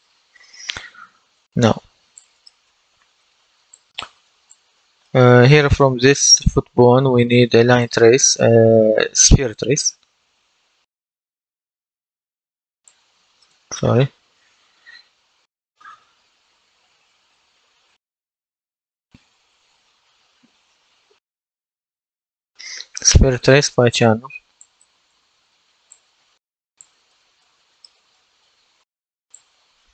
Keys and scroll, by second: 9.6-11.9 typing, 14.0 typing, 15.1-16.8 typing, 18.8 BackSpace, 20.5-22.3 typing.